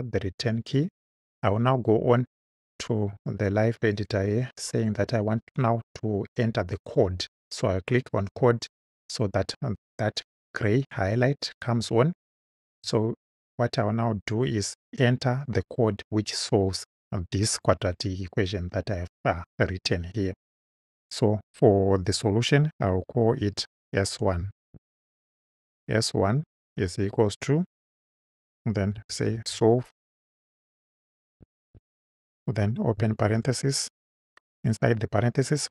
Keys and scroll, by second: 0.4 Return, 24.7 shift+s, 25.7 shift+|, 26.6 =, 28.7-30.0 typing, 31.3 v, 31.7 e, 33.2 shift+9.